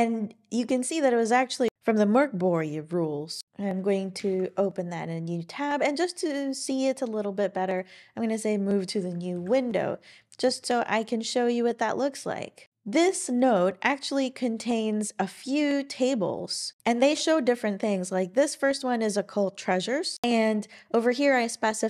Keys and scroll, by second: 0.4 typing, 4.2 super+Return, 9.3 ctrl+alt+i.